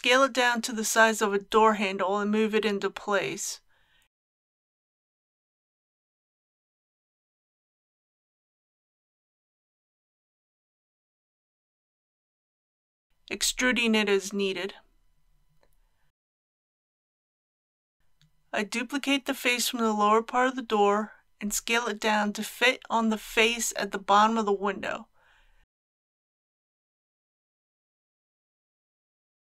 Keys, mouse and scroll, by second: 4.8 click, 5.7 g, 7.0 shift+x, 11.0 click, 11.6 middle click, 13.2 typing, 16.9 shift+click, 18.0 click, 19.7 KP_3, 21.1 shift+d, 25.6 s, 27.4 click, 27.8 s, 28.2 y.